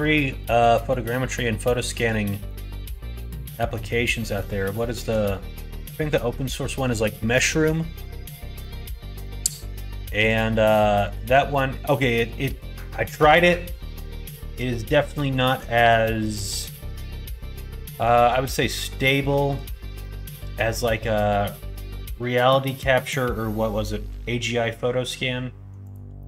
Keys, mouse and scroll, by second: 0.3 middle click, 1.6 shift+middle click, 2.4 middle click, 3.1 middle click, 4.1 middle click, 4.7 shift+middle click, 6.1 middle click, 7.2 shift+middle click, 7.7 middle click, 8.5 shift+middle click, 9.2 middle click, 10.2 click, 11.0 shift+click, 11.4-12.5 middle drag, 13.9 middle click, 15.2 shift+middle click, 15.9 middle click, 17.2 shift+middle click, 17.6 middle click, 19.0 middle click, 20.0 shift+middle click, 20.6 middle click, 21.3 middle click, 25.8 click, 26.1 middle click.